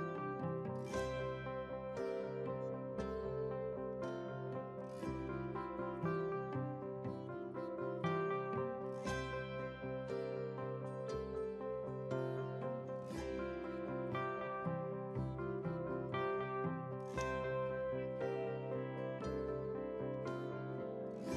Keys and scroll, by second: 19.0 ctrl+a.